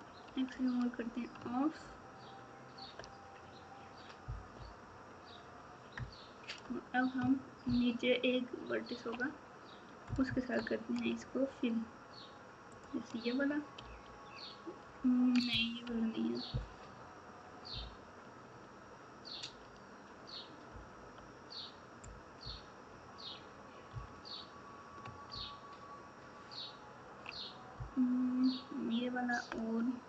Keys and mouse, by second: 0.5 alt+z, 1.8 ctrl+KP_8, 4.5 KP_Divide, 5.9 KP_Add, 7.6 ctrl+KP_2, 10.0 KP_Add, 10.2 KP_Add, 13.8 f, 17.7 KP_8, 20.6 KP_8, 25.2 ctrl+KP_2, 25.8 ctrl+KP_2, 27.7 ctrl+KP_4, 28.2 ctrl+KP_4.